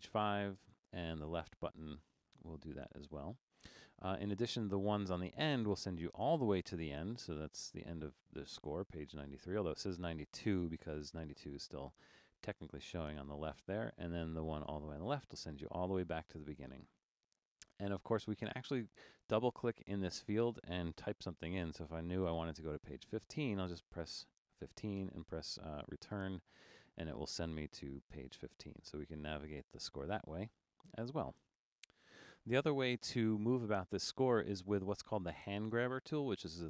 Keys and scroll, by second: 22.9 typing.